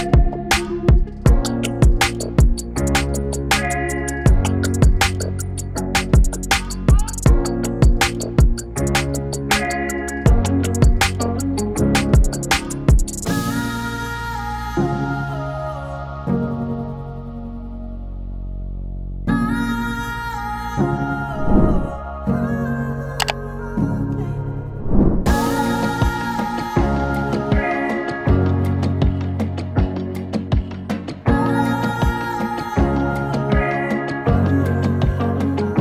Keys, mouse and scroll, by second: 1.6-4.4 drag, 4.4-9.4 drag, 9.4 ctrl+z, 11.2-14.4 drag, 14.4-20.1 drag, 20.1 ctrl+shift+c, 25.6 typing, 25.6 Return, 27.2 click, 28.2 Return, 28.8 click, 29.7 click, 32.0 click, 35.5 click.